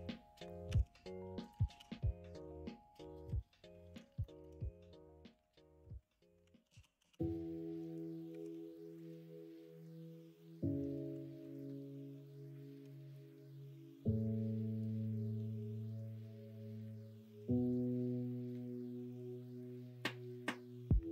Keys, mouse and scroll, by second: 0.6 g, 1.6 ctrl+z, 4.2 middle click, 6.6 ctrl+z, 8.3 1, 11.4 ctrl+b, 18.6-20.9 middle drag.